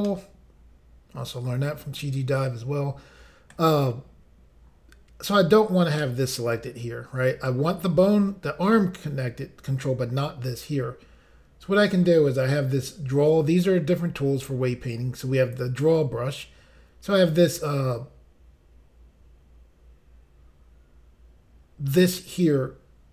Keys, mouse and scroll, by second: 0.0 middle click, 4.0 scroll up 1, 6.0 middle click.